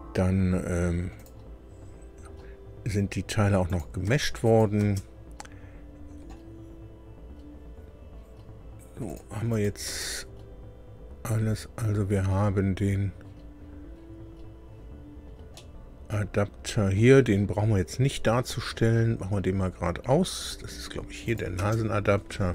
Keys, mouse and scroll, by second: 1.1 click, 3.6 click, 4.0 space, 4.4 click, 4.7 space, 7.5 scroll up 2, 8.1 scroll down 2, 9.0 click, 9.5 click, 9.8 space, 11.2-11.7 scroll up 2, 12.2 scroll up 2, 13.1-14.1 scroll down 6, 15.2 scroll down 1, 15.5 middle click, 15.5-17.1 drag, 17.4-17.8 scroll up 2, 18.4-18.7 scroll up 2, 19.2 scroll up 2, 20.1-20.4 scroll up 2, 21.2 click, 21.5 space, 22.2-22.5 scroll down 6.